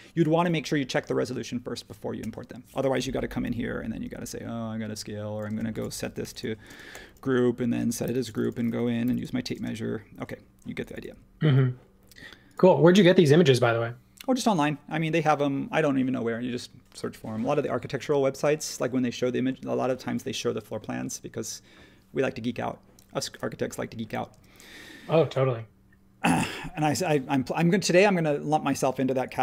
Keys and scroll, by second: 3.4 s, 6.2 l, 7.5 typing, 8.0 super+g, 9.0 t, 9.5 space, 11.4 super+w, 24.3 space.